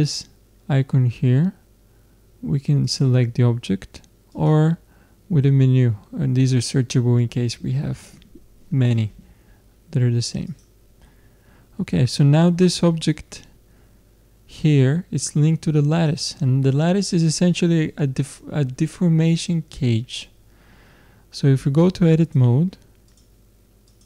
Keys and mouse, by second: 4.3-11.3 drag, 15.9-17.9 drag, 22.2-24.0 drag.